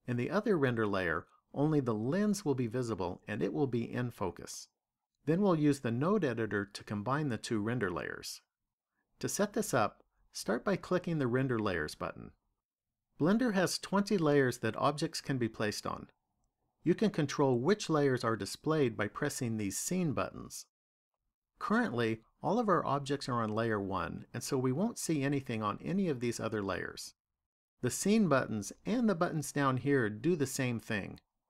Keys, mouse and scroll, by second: 10.9 click, 25.4 click, 26.1 click, 27.1 click.